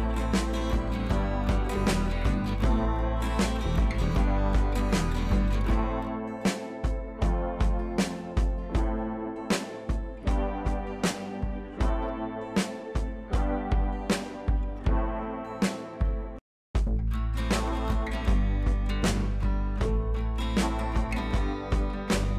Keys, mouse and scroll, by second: 5.4 click, 6.4 shift+F2, 7.0 b, 8.0 click, 9.4 click, 14.1 ], 14.2 ], 14.3 click, 18.3-18.6 scroll down 1, 19.1-20.0 scroll up 1.